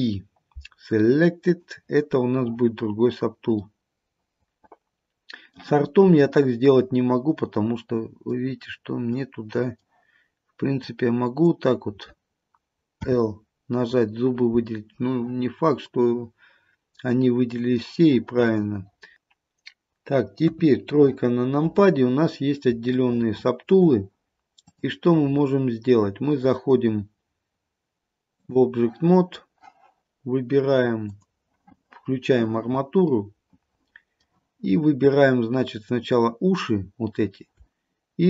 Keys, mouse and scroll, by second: 3.8 middle click, 4.0 middle click, 8.8-9.3 scroll up 1, 9.3 middle click, 10.9 click, 13.2 l, 16.0 middle click, 18.6 click, 20.5 KP_3, 21.3-22.7 scroll down 1, 23.1 shift+middle click, 24.8 click, 31.2 click, 33.3 middle click, 34.7-35.2 scroll up 1, 35.9 click.